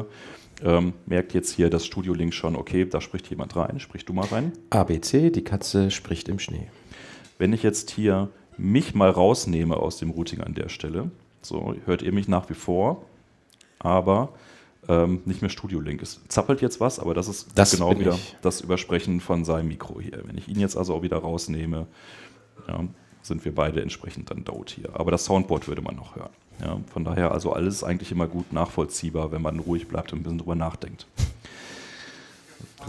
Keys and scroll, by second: 7.3 super+Tab, 12.5 super+Tab, 20.3 super+Tab, 22.8 alt+super+Tab, 23.3 super+Tab, 24.4 super+Tab.